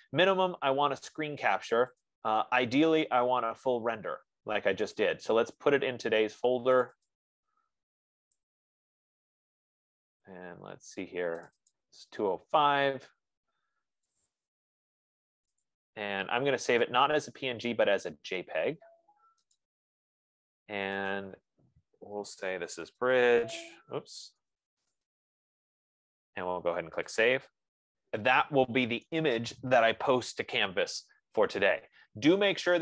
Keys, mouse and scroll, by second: 3.2 F15, 7.1 click, 7.6 click, 8.8 click, 9.1 click, 11.9 click, 12.2 click, 14.5 click, 14.8 click, 16.1 click, 17.2 click, 20.0 click, 21.6 click, 22.8-28.4 typing, 27.6 click, 28.1 click.